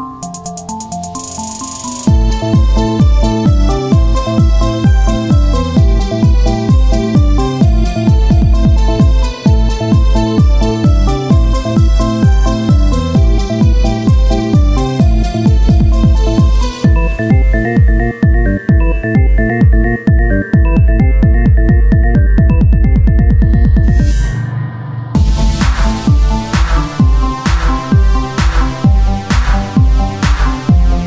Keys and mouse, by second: 2.6 ctrl+z, 3.4 shift+right click, 5.0 x, 7.0-9.4 right drag, 8.8 x, 10.9-15.0 drag, 15.0 x, 16.7 ctrl+Tab, 19.0 click, 21.6-24.8 drag, 28.0 click.